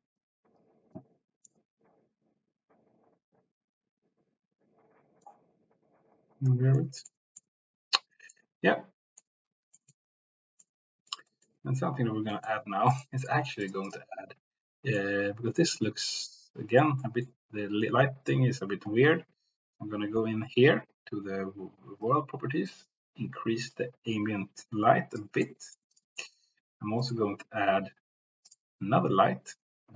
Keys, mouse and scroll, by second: 0.5 click, 1.4-5.2 middle drag, 6.2 click, 6.8 middle click, 7.4 middle click, 8.4 middle click, 9.8 shift+middle click, 10.7 middle click, 12.2 middle click, 12.9-13.4 drag, 13.6 click, 15.0-16.8 middle drag, 17.0 middle click, 17.8 middle click, 22.0 click, 25.5 middle click, 26.2 middle click, 27.1-29.9 drag.